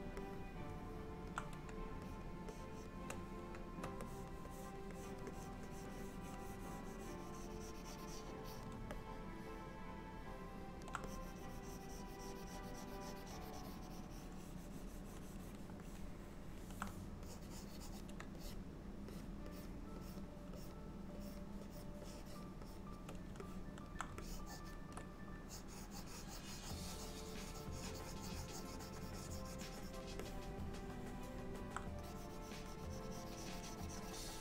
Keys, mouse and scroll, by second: 0.3 middle click, 2.1 shift+click, 2.6 shift+click, 4.1 click, 4.6 click, 5.0 click, 5.4 click, 5.8 click, 9.0 alt+middle click, 11.2 click, 15.9 middle click, 17.3 click, 18.5 shift+click, 19.6 click, 20.1 click, 20.3 shift+click, 20.6 shift+click, 21.3 shift+click, 22.1 shift+click, 22.7 click, 23.5 middle click, 24.3 ctrl+click, 25.5 ctrl+click, 30.3 middle click, 32.1 click.